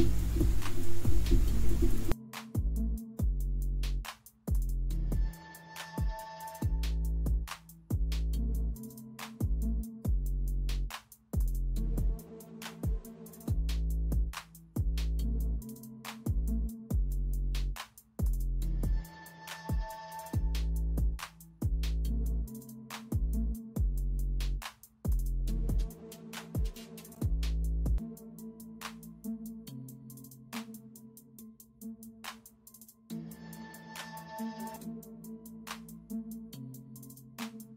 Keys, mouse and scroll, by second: 2.9 space, 4.7 typing, 7.5 space, 8.4 space, 8.9 space, 11.4-12.9 typing, 15.5-15.9 typing, 17.0 typing, 18.6 typing, 20.7-24.8 typing, 27.6-28.5 typing, 30.3 space, 32.0 ctrl+z, 35.1-36.2 typing.